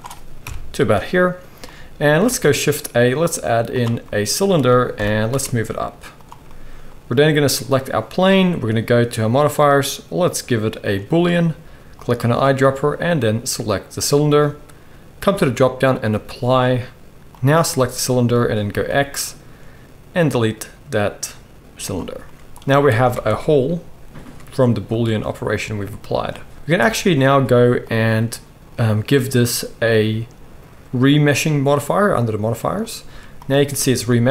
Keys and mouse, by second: 0.4 KP_1, 2.2 shift+a, 4.9 g, 7.4 middle click, 7.5 right click, 8.4-12.0 middle drag, 12.0-15.2 right drag, 15.2-17.4 middle drag, 17.4-29.9 right drag, 18.7 x, 23.1 Tab, 26.8 Tab, 27.9-29.9 drag, 27.9-34.3 middle drag, 33.1 z.